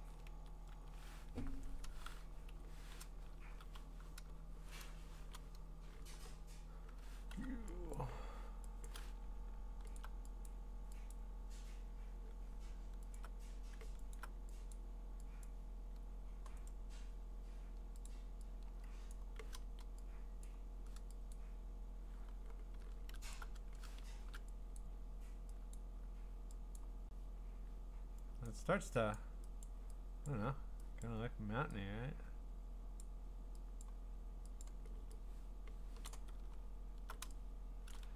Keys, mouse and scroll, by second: 0.0 ctrl+z, 0.9 v, 2.5 0, 3.5-4.6 typing, 6.1 b, 7.3 u, 8.0 click, 8.9 click, 10.0 alt+click, 10.3 alt+click, 10.5 click, 11.1 click, 13.1 alt+click, 13.2 click, 13.2 alt+click, 14.2 click, 14.7 click, 15.5 click, 16.7 right click, 18.1 click, 20.5 click, 21.3 click, 23.4 alt+click, 23.7 alt+click, 24.7 !, 24.8 click, 25.8 click, 26.4 alt+click, 26.8 click, 28.5 click, 29.1 click, 29.6 click, 30.3 click, 31.0 click, 33.0 click, 33.8 click, 34.6 click, 35.5 scroll, 36.5 scroll, 37.9 click, 38.0-38.1 typing.